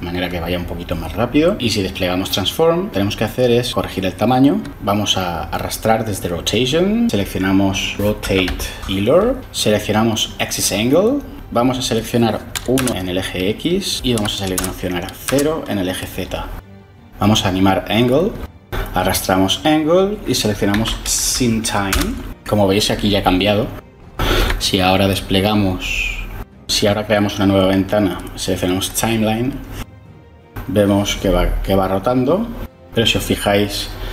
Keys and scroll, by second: 3.4 1, 4.4 Return, 6.7-8.2 typing, 12.4 typing, 14.5 0, 15.1 Return, 20.6-21.8 typing, 22.1 Return.